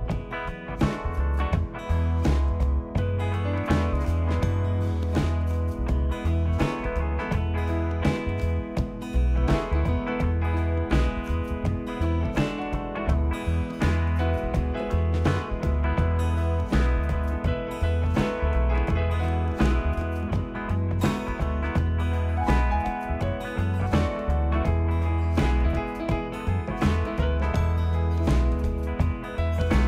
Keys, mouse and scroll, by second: 0.1-0.6 typing, 3.9 click, 6.6 click, 10.5 click, 14.0-14.5 scroll, 15.2 click, 15.2 scroll, 16.4 click, 17.7 click, 19.4 click, 21.5 click, 26.4 click, 26.7-29.2 scroll, 29.2 scroll, 29.5 click.